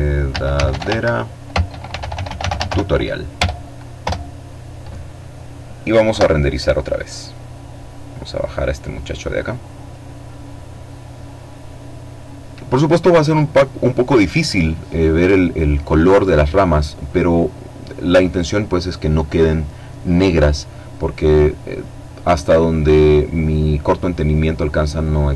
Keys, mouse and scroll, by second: 0.0-1.2 typing, 1.9 Return, 2.5 Return, 4.6 F12, 6.7-8.9 drag.